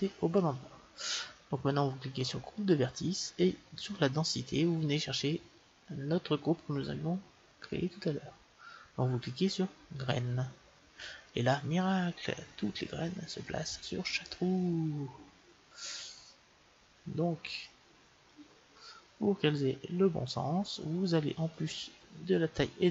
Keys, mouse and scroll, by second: 2.5-5.9 drag, 11.2-13.2 middle drag, 21.3-22.9 middle drag.